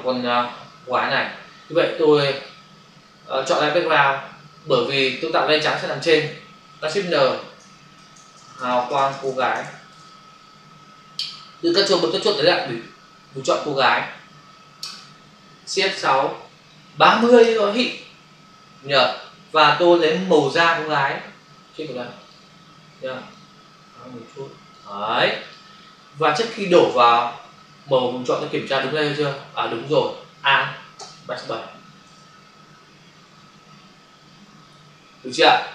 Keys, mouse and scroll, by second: 2.4 click, 7.1-9.4 typing, 9.9 Return, 13.8 ctrl+click, 16.1 shift+F6, 17.1-17.4 typing, 18.0 Return, 20.7 click, 22.2 click, 23.3 click, 25.3 click, 31.0 alt+BackSpace, 32.1 ctrl+d.